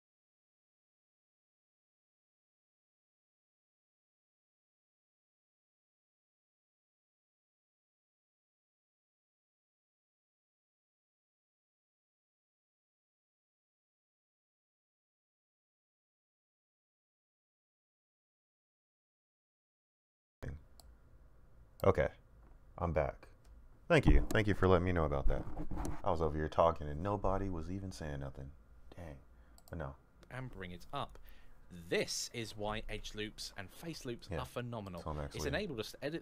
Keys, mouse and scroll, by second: 30.7 click, 35.6 click.